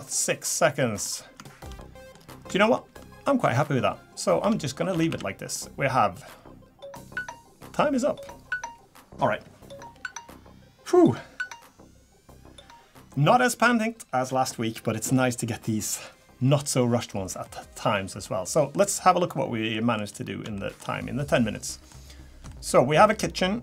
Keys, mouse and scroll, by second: 0.0-0.6 scroll down 4, 0.7 middle click, 1.0 scroll up 2, 1.4 shift+middle click, 1.8 middle click, 2.1 scroll down 2, 2.7 shift+middle click, 4.4 Tab, 4.9 a, 5.1 a, 5.5 middle click, 18.1 middle click, 18.5 middle click, 19.7 middle click, 20.0 scroll up 4, 20.5 shift+middle click, 21.0 scroll down 3, 21.5 middle click, 22.5 shift+middle click, 23.1-23.5 scroll up 5.